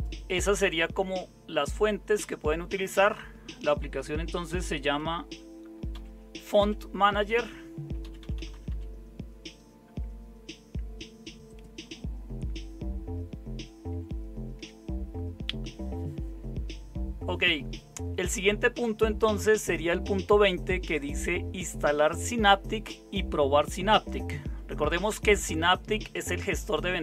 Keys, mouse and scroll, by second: 3.9 Up, 4.8 Up, 5.9 Up, 6.6 Down, 8.0 Down, 8.2 Down, 8.3 Down, 8.5 Down, 13.9 super+7.